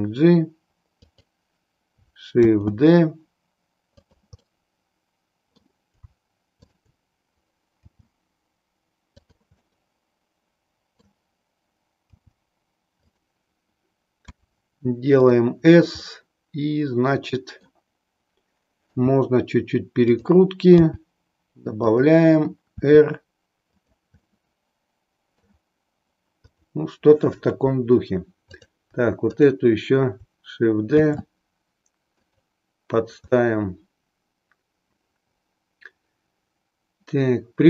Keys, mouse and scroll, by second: 2.4 shift+d, 4.2 click, 4.4-5.7 middle drag, 7.8 g, 9.3 click, 9.7-11.1 middle drag, 12.0 g, 14.2 s, 15.3 click, 16.0-17.9 middle drag, 18.9 r, 20.2 click, 20.8 g, 21.9 click, 22.9 r, 23.8 click, 24.3-25.5 middle drag, 26.4 click, 28.4 click, 29.4 click, 31.0 shift+d, 33.4-37.6 middle drag.